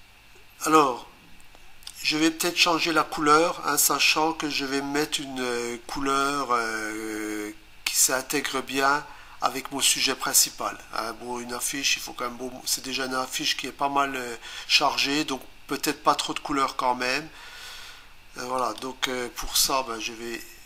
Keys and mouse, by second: 18.6 click.